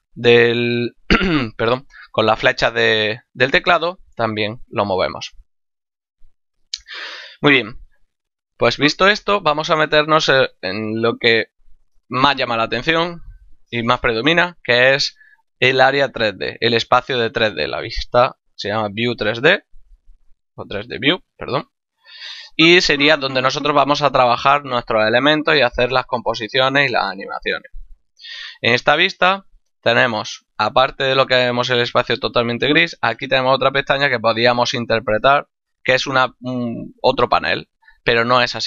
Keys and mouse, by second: 0.2 Right, 2.2 Right, 2.8 Left, 19.1 click.